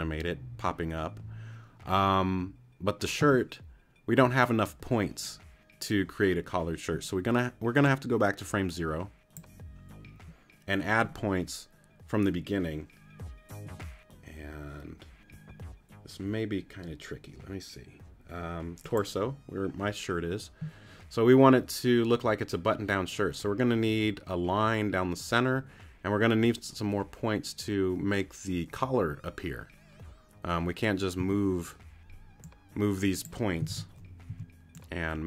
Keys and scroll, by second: 31.2 t, 34.3 super+t, 34.8 t.